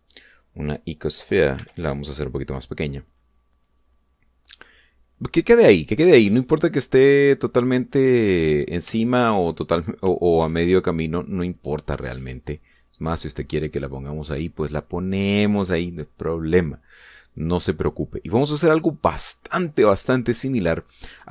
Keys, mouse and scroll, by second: 0.1 click, 2.2 s, 3.6 click, 4.3-6.4 drag, 6.4-8.4 middle drag, 8.9 middle click, 9.5 shift+middle click, 10.0-10.3 shift+scroll up 2, 10.7 shift+middle click, 12.1 click, 12.9-14.8 drag, 17.7-19.0 middle drag, 19.6-20.0 scroll down 1, 20.3 scroll down 1.